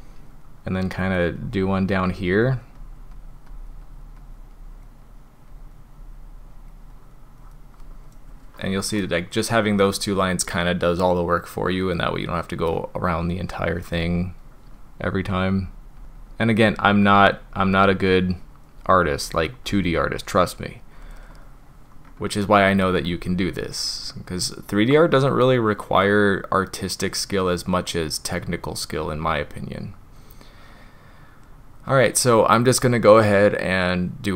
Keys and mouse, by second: 1.0 click, 1.4 click, 1.8 click, 2.1 click, 2.5 click, 2.8 click, 3.2 click, 3.5 drag, 3.9 click, 4.2 click, 4.6-4.9 drag, 5.1 drag, 5.5 drag, 6.0 drag, 6.6 click, 6.9 drag, 7.4 drag, 9.0-12.7 middle drag, 15.2 click, 15.6 click, 16.2 drag, 16.7 drag, 17.1 drag, 17.6 drag, 18.0 drag, 18.5 click, 18.8 drag, 19.2 drag, 19.7 drag, 20.3-20.6 drag, 22.4-32.8 drag.